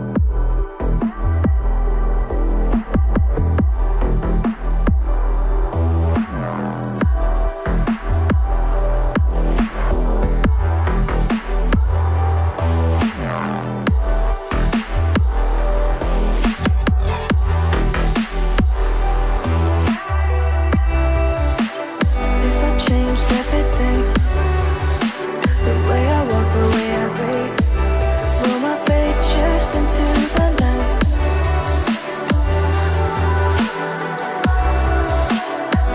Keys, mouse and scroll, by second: 3.7 ctrl+z, 34.0 Delete.